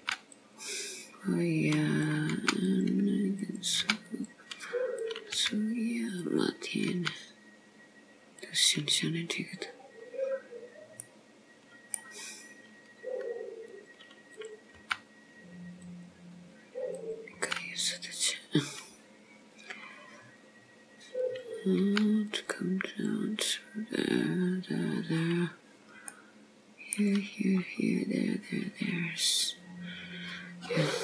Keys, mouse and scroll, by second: 0.1 g, 2.1 click, 2.5 g, 3.5 click, 3.9 g, 5.1 click, 5.5 g, 7.0 g, 10.0-10.4 scroll up 1, 11.1 middle click, 13.8 click, 14.4 click, 14.9 g, 17.0 click, 17.5 g, 18.9-19.9 scroll down 2, 21.3 click, 21.9 g, 22.9 click, 26.1 middle click, 27.7 scroll up 2.